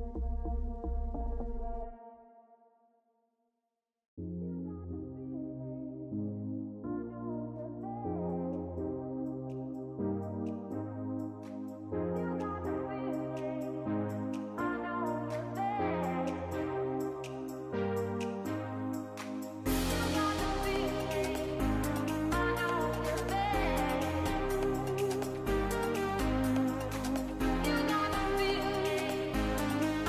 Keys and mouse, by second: 0.0-0.6 drag, 0.7 click, 1.4 g, 2.4-4.4 drag, 4.5-6.1 drag, 9.9 click, 10.5 click, 12.6 ctrl+s, 14.9 click, 16.2-17.8 drag, 18.4 click, 19.7-20.6 drag, 21.8-22.9 drag, 23.8 drag, 24.6 middle click, 25.9 click, 26.5 click, 28.2-28.7 middle drag, 28.7 click, 29.0 shift+a.